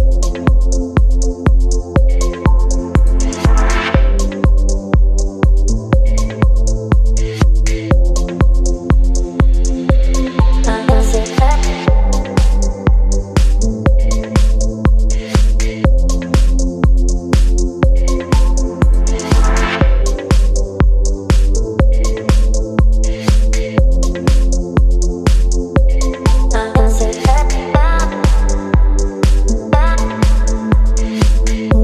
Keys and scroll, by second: 6.1 x, 6.3 ctrl+BackSpace, 7.2 ctrl+d, 14.9 ctrl+BackSpace, 15.5 ctrl+d, 16.6 space, 19.1 space, 20.1 v, 20.7 space, 29.0 Down, 30.5 Down.